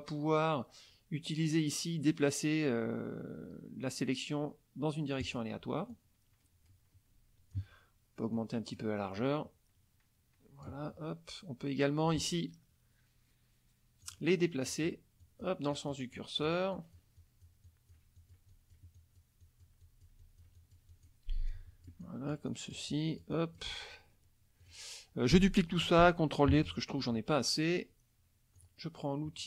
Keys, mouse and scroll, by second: 5.2 click, 5.9-7.7 drag, 8.3 click, 9.2-10.9 drag, 14.0 click, 14.7 click, 15.2 click, 15.7 click, 16.2 click, 16.7 click, 17.2 click, 21.5-23.8 drag, 24.6 click, 26.5 ctrl+d, 28.6 click.